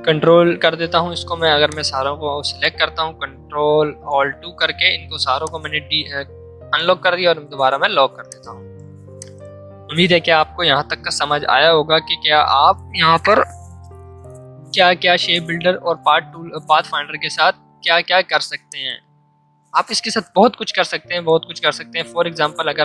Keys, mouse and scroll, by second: 1.7-3.7 drag, 3.7 ctrl+alt+2, 5.4-7.4 shift+drag, 7.4 ctrl+2, 8.2 click, 18.5 space, 18.7 click, 18.9 space, 22.1 m.